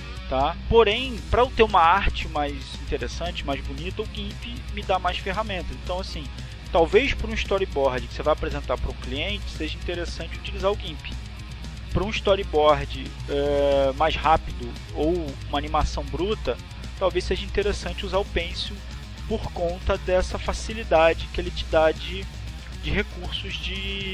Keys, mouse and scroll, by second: 1.4 click, 3.4 click, 6.9-13.1 drag, 16.0-24.1 drag.